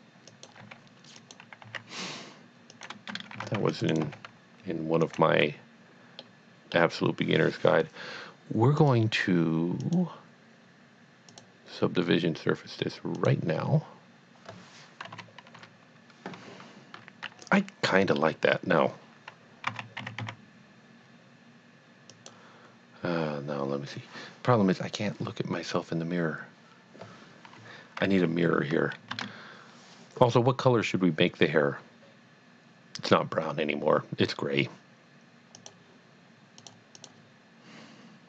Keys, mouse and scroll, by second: 0.4 click, 0.6 g, 1.3 click, 1.7 e, 2.8 click, 3.6 c, 3.8 click, 3.9 right click, 4.0 g, 5.1 click, 6.2 middle click, 6.4 scroll down 1, 6.8 scroll up 1, 8.8 click, 9.8 click, 11.4 click, 13.2 click, 15.1 KP_3, 17.6 middle click, 18.1-18.5 scroll up 1, 19.7 a, 20.1 s, 20.5 x, 22.1 click, 27.5 click, 27.6 KP_1, 29.1 Tab, 35.5 click, 36.6 click, 37.0 click.